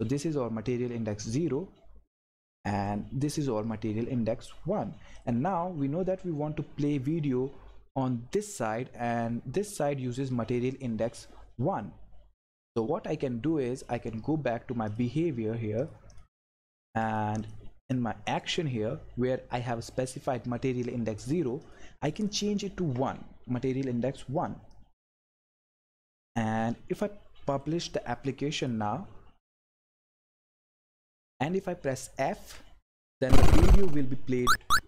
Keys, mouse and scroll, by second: 2.3 click, 5.1 click, 13.7 click, 21.6 click, 24.7 click, 32.4 f, 33.7 Left, 34.4 Up.